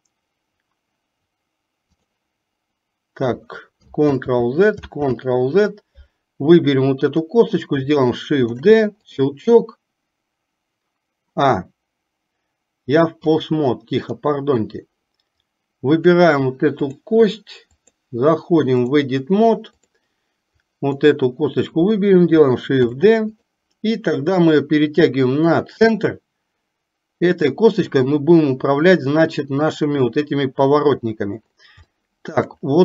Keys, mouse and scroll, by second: 0.0 click, 5.0 ctrl+z, 6.9-7.4 drag, 13.4-14.4 drag, 15.5 click, 17.0-18.2 drag, 18.9-20.2 drag, 20.7 click, 24.5-27.7 drag, 32.0 shift+middle click.